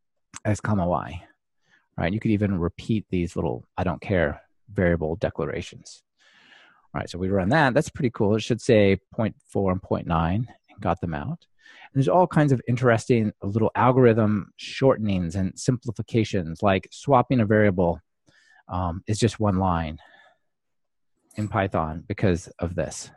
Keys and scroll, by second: 1.4 alt+super+l, 7.7 ctrl+r.